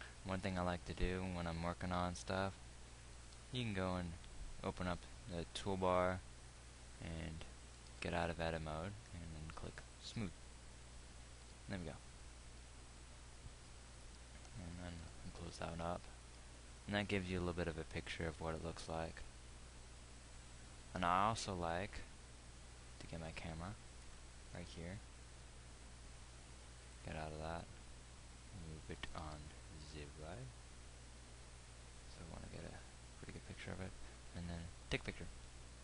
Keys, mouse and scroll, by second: 3.5 t, 8.3 Tab, 11.9 Tab, 15.5 t, 21.9 KP_1, 24.5 ctrl+alt+KP_0, 27.3 Tab, 29.5 g.